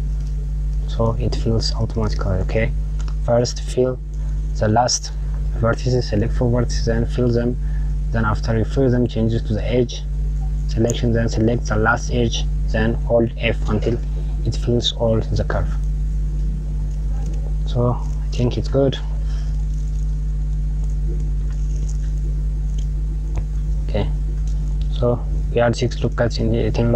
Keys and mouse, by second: 1.2 click, 16.3 click, 18.3 KP_Subtract, 19.0 Tab, 20.0 click, 20.8 click, 23.7 click, 24.1 Tab.